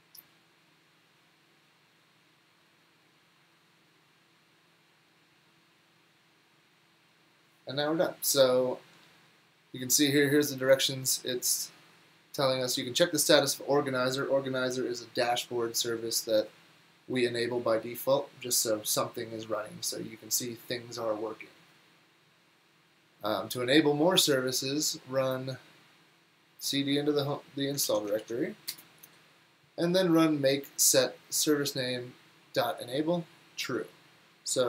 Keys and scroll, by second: 27.9 super+c, 28.2 super+v, 28.7 Return.